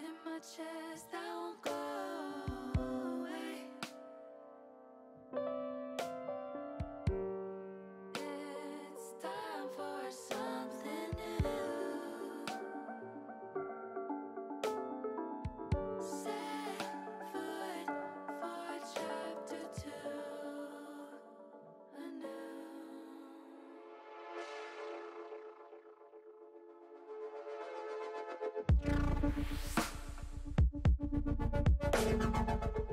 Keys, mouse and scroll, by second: 1.2 s, 2.7 click, 3.2 s, 5.4 click, 7.3 s, 7.6 z, 9.9 click, 11.3 click, 12.9 r, 14.3 click, 15.0-16.6 drag, 21.6 shift+middle click, 23.3 ctrl+r, 27.4 click, 27.9-29.1 middle drag, 30.3 middle click.